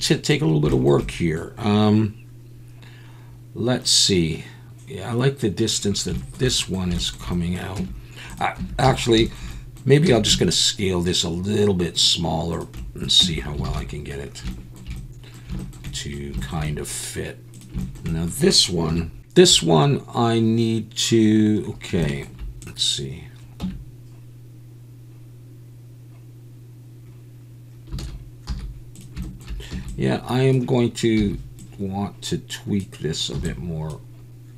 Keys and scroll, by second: 7.8 Tab, 8.6 Tab, 8.9 a, 10.0 s, 13.2 Tab, 13.7 alt+a, 18.9 KP_7, 23.6 Tab, 28.0 alt+a, 28.5 z, 29.7 b, 31.2 b, 33.3 b.